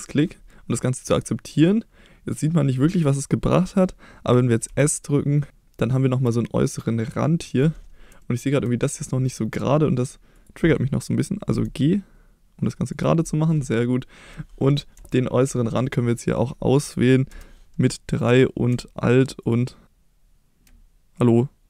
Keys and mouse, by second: 4.7 s, 7.5 click, 8.2 shift+middle click, 11.5 g, 12.9 click, 15.1 shift+middle click, 17.3 3, 19.4 alt+click, 21.2 alt+click.